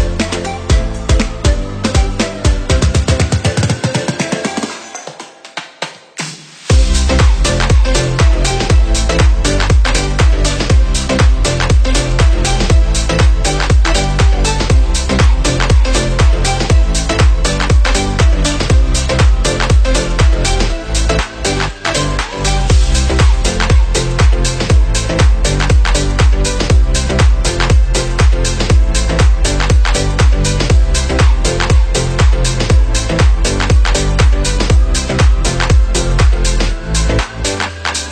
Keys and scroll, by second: 3.9 Delete, 5.5 Left, 18.2 Left, 34.4 ctrl+c, 34.7 ctrl+v.